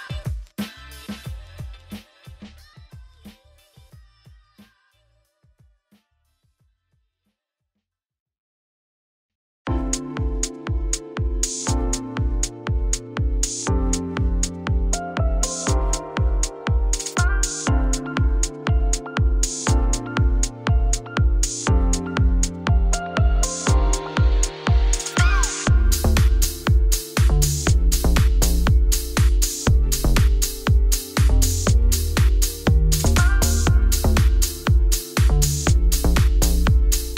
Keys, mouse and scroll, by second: 0.5 shift+a, 3.4-3.8 scroll up 5, 3.8 s, 10.1 KP_1, 12.9-14.0 middle drag, 14.0 Tab, 14.2-15.4 middle drag, 15.4-16.6 scroll down 1, 16.6-17.3 scroll down 1, 17.3 scroll down 1, 17.4-18.6 middle drag, 18.6 click, 18.9 shift+click, 19.2-21.9 middle drag, 21.9 click, 22.1 click, 22.6 click, 22.8 Tab, 23.2 3, 23.6 middle click, 24.1 s, 25.2 g, 26.6 middle click, 27.3 s, 28.2 middle click, 28.4 g, 29.5 scroll down 4, 29.6 middle click, 30.0 Tab, 30.3 middle click, 30.9 click, 31.3 middle click, 32.0 Tab, 32.8 middle click, 33.6 shift+a.